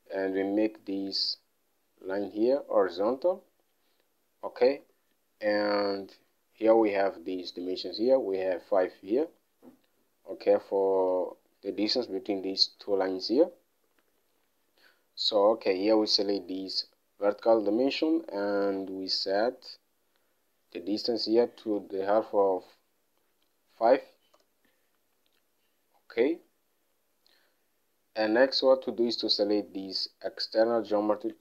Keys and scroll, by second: 5.1 alt+Tab, 14.6 alt+Tab, 22.4 typing, 23.9-24.6 typing, 24.7 Return.